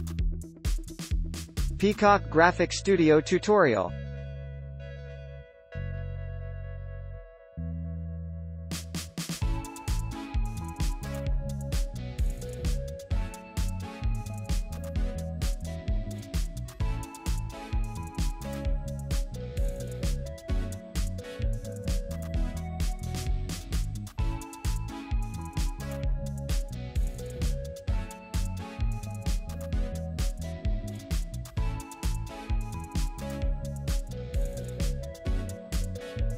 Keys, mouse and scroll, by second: 3.7 alt+click, 7.5 alt+click, 7.8 space, 9.3 alt+click, 10.3 ctrl+z, 13.6 alt+click, 14.1-15.4 scroll up 1, 17.7 space, 19.3 alt+click, 21.6 alt+click, 30.1 ctrl+z.